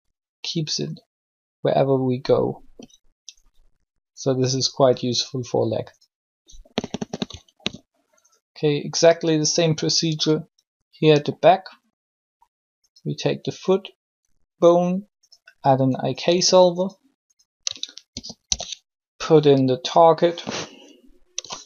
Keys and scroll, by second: 16.2 a, 18.0 shift+i, 18.4 shift+k.